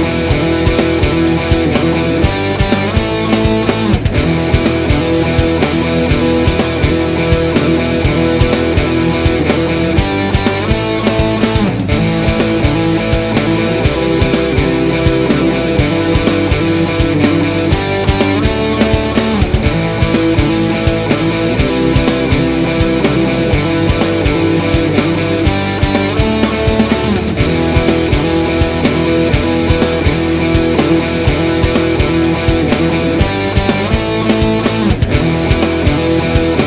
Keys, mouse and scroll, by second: 0.2 s, 3.6 s, 5.5 click, 6.0 s, 6.6 click, 7.4 s, 8.5 click, 8.8 s, 10.2 click, 10.6 s, 11.0 click, 11.2-14.0 middle drag, 12.0-13.2 scroll, 14.0 click, 14.5 click, 16.0 click, 16.8 KP_7, 17.2 e, 18.6 click, 19.6 g, 21.6-25.4 middle drag, 22.4 ctrl+r, 25.4 click, 25.9 ctrl+r, 27.1 Escape, 27.4 click, 28.0 scroll up 1, 28.5 g, 29.6 click, 29.7 middle click, 30.3 click, 32.4 click, 32.5-34.0 middle drag, 32.9-33.4 scroll down 1, 33.6-34.0 scroll down 1, 34.0-35.3 drag, 34.4 g, 35.4 middle click, 36.0-36.3 scroll up 1, 36.3 ctrl+r.